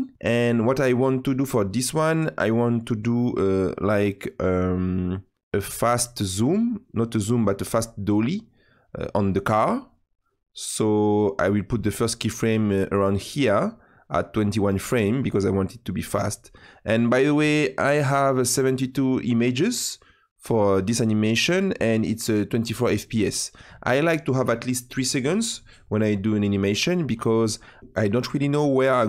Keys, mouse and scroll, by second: 4.6-6.9 drag, 11.2-21.4 drag.